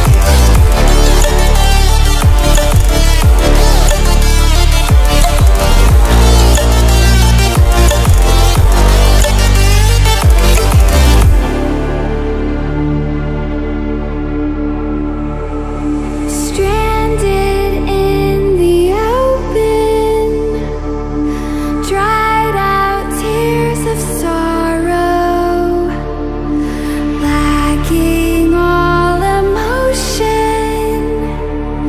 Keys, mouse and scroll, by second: 1.4-2.2 ctrl+alt+scroll up 2, 2.2-3.5 ctrl+alt+scroll up 1, 3.5-3.9 scroll up 1, 4.5-5.1 click, 8.5-9.0 ctrl+alt+scroll down 2, 9.0-9.3 ctrl+alt+scroll up 2, 11.0 click, 13.4 click, 19.1 click, 28.0 click, 31.4 click.